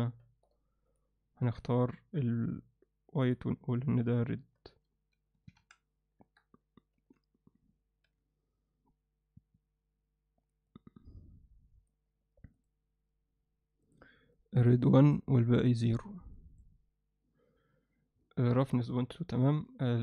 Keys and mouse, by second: 0.2 middle click, 1.6 click, 4.7 click, 6.9 z, 8.0 z, 10.7-11.9 drag, 12.6 click, 19.9-20.0 alt+middle drag.